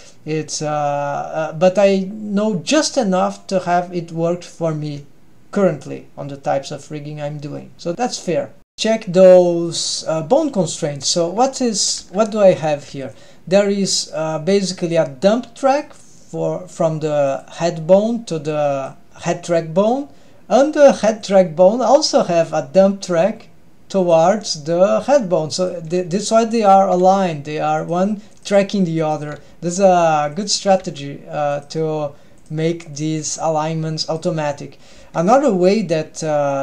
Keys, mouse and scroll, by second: 8.7 ctrl+alt+shift+super+r, 9.7 drag, 10.4 middle click, 11.3-12.0 scroll down 2, 12.0 n, 12.6 click, 12.7 g, 13.6 drag, 14.1 middle click, 15.7 click, 17.4 click, 18.6 click, 21.3 click, 22.2 click, 24.2 click, 25.7 click, 25.9 g, 27.0 g, 28.5 drag, 29.2 drag, 29.5 g, 30.8 g, 32.5 click, 33.1 drag, 33.3 g, 35.0 g.